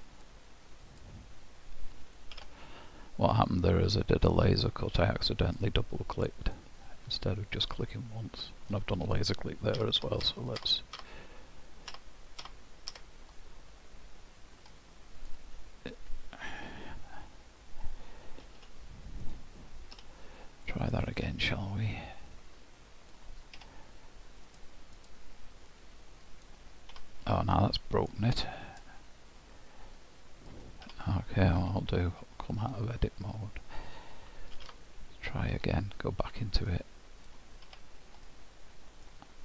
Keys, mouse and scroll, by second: 2.9 ctrl+z, 4.4 click, 7.4 middle click, 10.3 ctrl+z, 10.8 ctrl+z, 11.3 ctrl+z, 11.8 ctrl+z, 12.4 ctrl+z, 12.9 ctrl+z, 13.4 ctrl+z, 14.7 middle click, 18.5 g, 20.0 h, 20.7 middle click, 22.3 click, 25.0 click, 25.8 click, 27.6 middle click, 28.7 click, 30.0 click, 32.6 click, 34.6 alt+w, 36.6 click, 38.3 middle click.